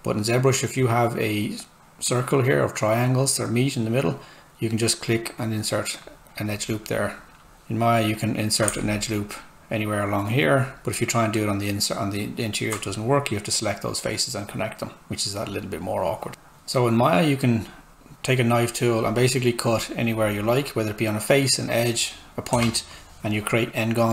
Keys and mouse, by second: 3.9 click, 7.4 Tab, 10.4 ctrl+click, 16.3 z, 17.5 click, 22.5 Return.